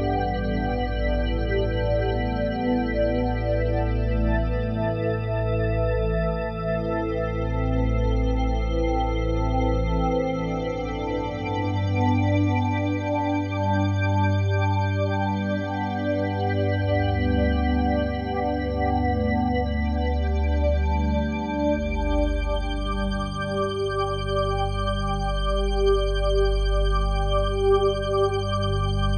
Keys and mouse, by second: 6.1 s, 12.5 3, 13.7 shift+d, 14.1 z, 14.9-17.8 drag, 17.8 1, 19.2 3, 19.8-21.3 ctrl+alt+drag, 20.3 typing, 21.4 Tab, 22.2-23.6 ctrl+alt+drag, 23.6 shift+s, 24.3-26.3 shift+drag, 26.3 Tab, 27.1-29.1 drag.